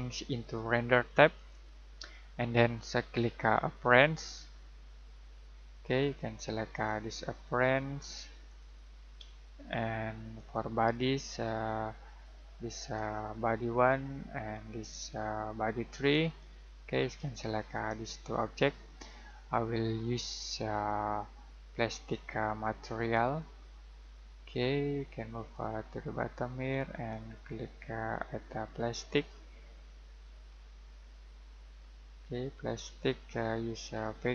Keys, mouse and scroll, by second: 0.0 click, 4.0 click, 16.1 click, 21.9 click, 25.8-26.6 scroll down 1, 26.6-27.3 scroll up 1, 27.3-29.0 scroll down 1, 29.1 click, 30.4-32.7 scroll down 1, 32.7 click, 33.2-34.3 scroll down 1.